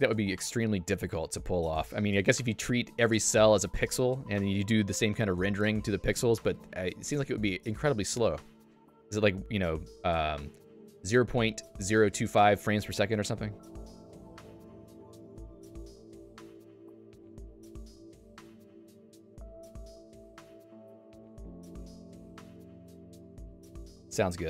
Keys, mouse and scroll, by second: 21.2 click, 22.4 j, 24.1 Escape.